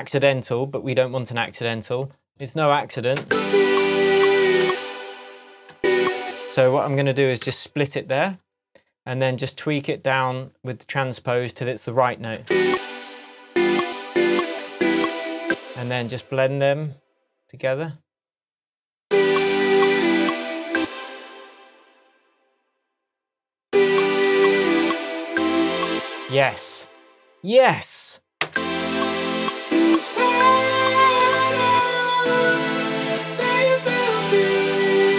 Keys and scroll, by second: 3.2 space, 4.6 space, 5.7 space, 7.4 super+e, 12.4 space, 20.7 space, 25.8 space, 28.4 space, 31.2 k.